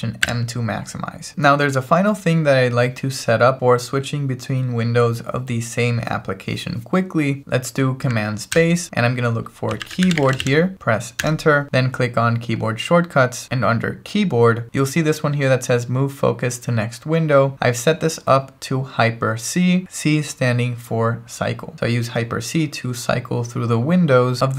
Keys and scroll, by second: 0.3 alt+m, 8.5 super+space, 9.4-10.9 typing, 11.3 Return.